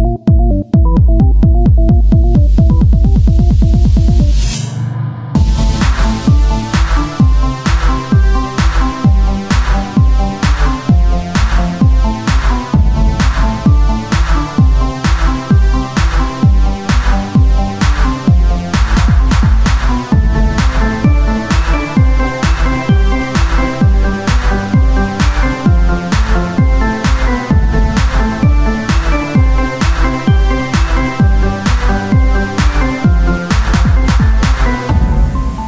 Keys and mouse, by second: 2.1 ctrl+Tab, 5.3 e, 7.1 r, 10.6 KP_1, 10.6 z, 11.6 e, 13.3 z, 16.8-19.7 drag, 19.7 ctrl+Tab, 22.9-31.9 drag, 22.9 z, 27.5 Tab, 33.2 Tab.